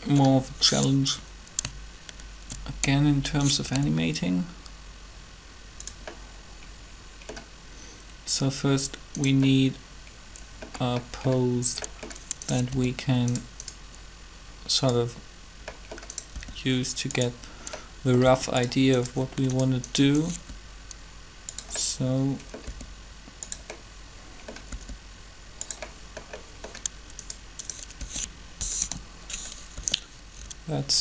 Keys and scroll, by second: 3.6 shift+r, 12.7 r, 16.3 r, 18.2 r, 20.4 shift+r, 22.6 r, 24.7 r, 28.0 r, 28.6 7, 29.7 r.